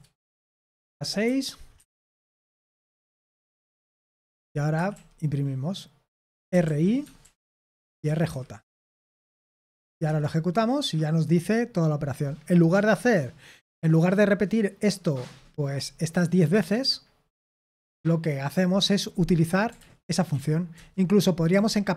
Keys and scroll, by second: 0.0-10.5 typing, 19.7 ctrl+p, 20.0 ctrl+p, 20.7 Return.